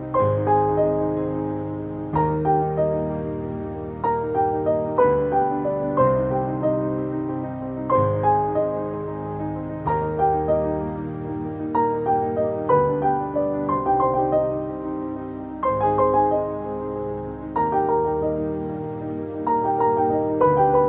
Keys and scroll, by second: 8.6 ctrl+t, 14.3 ctrl+j, 18.1 ctrl+t.